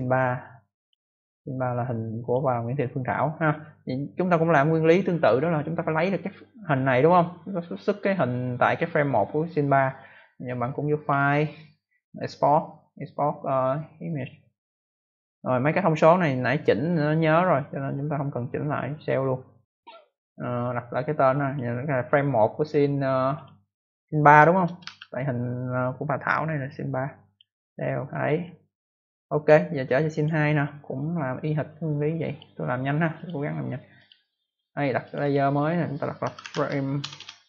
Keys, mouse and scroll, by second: 0.7 click, 2.2 click, 10.9 click, 14.0 click, 18.9 click, 21.4 click, 22.6 click, 23.3 click, 24.6 BackSpace, 24.8 BackSpace, 27.2 click, 29.3 click, 30.1 click, 31.6 click, 33.1 click, 33.2 click, 33.9 click, 35.0 click, 35.2 double click, 35.9-37.4 typing.